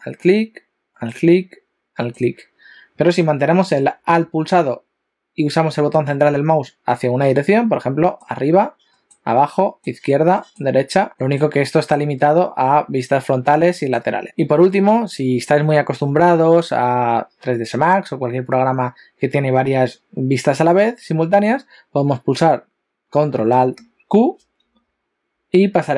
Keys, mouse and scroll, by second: 1.9 alt+middle click, 8.0 alt+middle click, 8.9 alt+middle click, 9.7-11.1 alt+middle click, 10.4 alt+middle click, 11.2 alt+middle click, 11.8 alt+middle click, 13.8 alt+middle click, 14.2 shift+middle click, 24.4 ctrl+alt+q.